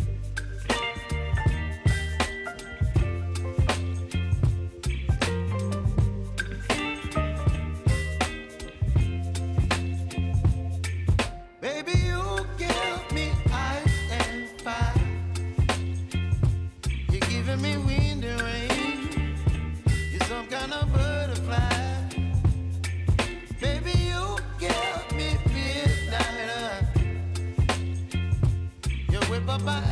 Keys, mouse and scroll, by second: 0.0 click, 1.1 right click, 1.9 click, 3.2 scroll up 1, 3.8 shift+click, 4.5 [, 5.3 click, 8.5 click, 9.3 scroll down 1, 10.3 click, 11.5-12.3 typing, 14.9 click, 17.7-19.7 drag, 22.4 p, 23.3 click, 24.5 space, 26.0 click, 27.3-29.9 typing, 28.8 click.